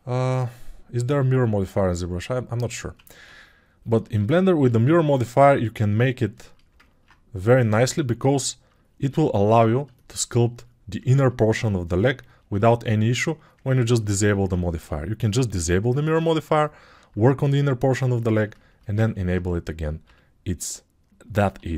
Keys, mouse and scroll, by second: 10.1 alt+click, 10.1 alt+middle click, 10.1 alt+right click, 12.3 ctrl+click, 12.3 ctrl+middle click, 12.3 ctrl+right click, 21.6 g.